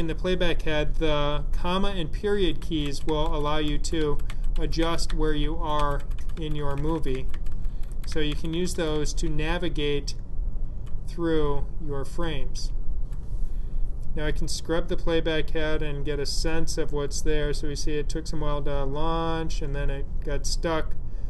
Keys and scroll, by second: 2.2 ,, 2.5 ., 6.2-9.1 typing.